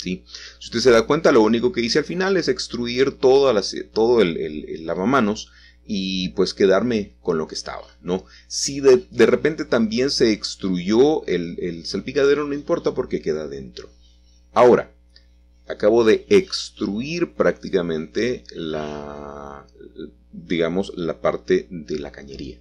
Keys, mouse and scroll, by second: 1.9-2.5 typing, 5.1 click, 5.4-6.9 scroll down 1, 6.3-8.5 middle drag, 8.5 g, 9.0 z, 10.7 click, 12.3-13.6 scroll down 2, 14.0-14.7 scroll up 2, 14.7-18.4 shift+middle drag, 18.5-20.5 shift+middle drag, 21.4 ctrl+s.